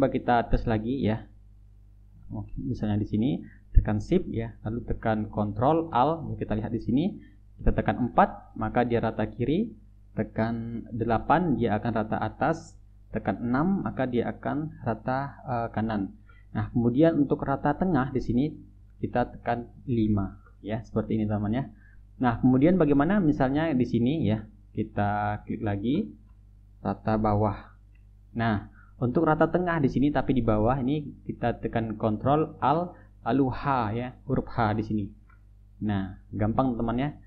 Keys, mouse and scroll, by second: 0.5 click, 0.9 click, 2.6-3.3 drag, 3.9 shift+click, 8.5 ctrl+alt+KP_4, 11.4 ctrl+alt+KP_8, 13.8 ctrl+alt+KP_6, 20.4 ctrl+alt+KP_5, 22.5-22.9 drag, 23.5 click, 24.0-25.6 ctrl+drag, 25.8 shift+drag, 28.2 ctrl+alt+2, 35.1 ctrl+alt+h, 36.4 drag, 36.9 click.